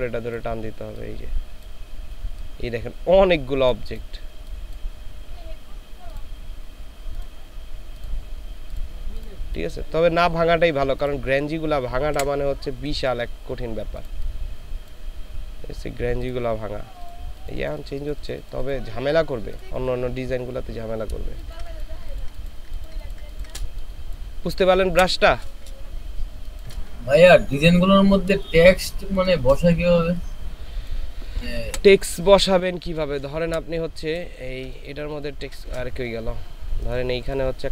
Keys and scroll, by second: 12.2 Delete, 21.3 ctrl+space, 22.0 ctrl+space, 22.7 ctrl+space, 23.2 ctrl+space, 24.9 Delete, 26.3 ctrl+space, 28.7 ctrl+space, 31.7 Delete, 34.4 ctrl+space, 35.0 ctrl+space.